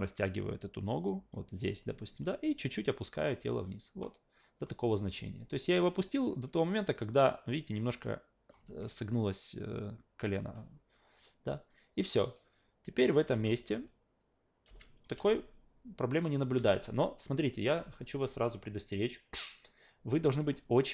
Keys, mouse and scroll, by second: 2.7 click, 7.0 click, 8.6 ctrl+z, 11.7-13.2 drag, 13.3 alt+v, 14.7 alt+v, 15.0 click, 15.2 alt+v, 16.6 alt+v.